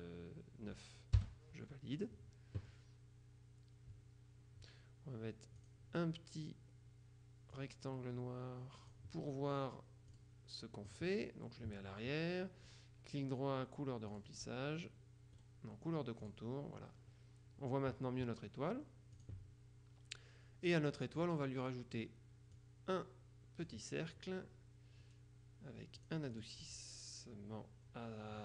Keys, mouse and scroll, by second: 1.3 Return, 5.7 click, 6.5-6.9 scroll up 2, 7.6-9.5 drag, 10.2 click, 10.9 click, 12.7 right click, 12.9 click, 14.3 click, 15.5 click, 16.3 click, 19.3 click, 21.3 click, 22.7-24.3 drag, 25.2-25.7 scroll down 1, 26.1 click.